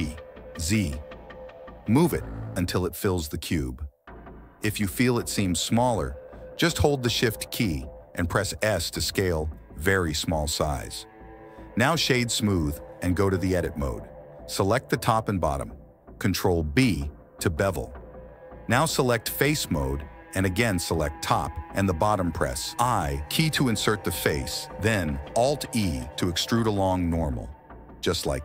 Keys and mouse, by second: 1.1 g, 2.1 s, 3.2 g, 5.7 click, 6.1 s, 7.1 g, 8.1 g, 9.5 click, 10.2 click, 10.2 right click, 13.8 click, 14.0 Tab, 15.5 alt+click, 15.6 ctrl+alt+z, 16.5 alt+shift+right click, 17.7 ctrl+b, 20.3 middle click, 20.7 click, 21.0 middle click, 21.4 shift+middle click, 22.0 i, 23.3 alt+e, 25.1 Tab, 26.4 click, 28.1 ctrl+s.